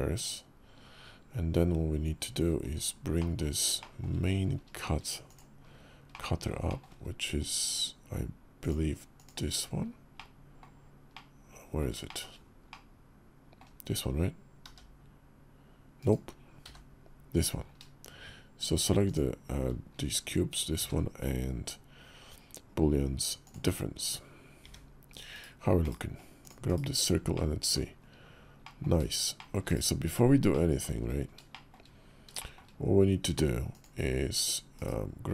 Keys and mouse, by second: 2.4 alt+h, 3.0 click, 3.6 shift+middle click, 4.5-5.4 shift+middle drag, 5.9 middle click, 6.4-8.4 shift+middle drag, 8.4 click, 9.9 middle click, 10.9-11.6 middle drag, 11.8 shift+middle drag, 12.4-13.4 middle drag, 14.4 g, 16.4 h, 17.1 drag, 18.8 shift+click, 20.5 q, 24.4 `, 25.1 /, 25.6 /, 26.2 click, 26.4 /, 27.1-27.5 middle drag, 28.4 middle click, 29.1 shift+middle drag, 29.4 /, 30.3-30.6 middle drag, 31.3 shift+drag, 32.1 shift+click, 33.5 click, 34.5 /.